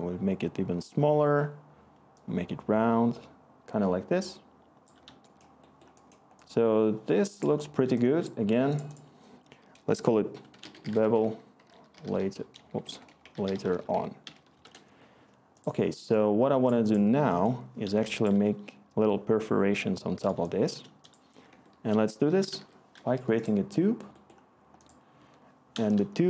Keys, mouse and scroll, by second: 10.2-15.1 typing, 21.4 Tab, 22.0-23.0 typing, 23.1 Return.